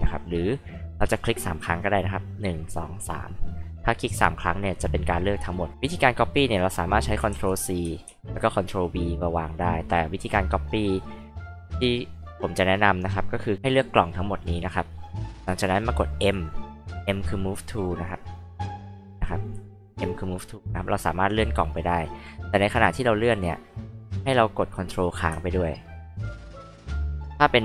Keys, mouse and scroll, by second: 0.3 click, 2.3 click, 2.6 click, 2.9 click, 7.3 ctrl+c, 8.1 ctrl+v, 9.4 click, 11.3 h, 11.5-11.9 drag, 13.8 click, 13.9 click, 14.1 click, 16.2 m, 17.9 click, 19.8 click, 21.7 click, 22.4 click, 24.0 click, 25.8 ctrl+click.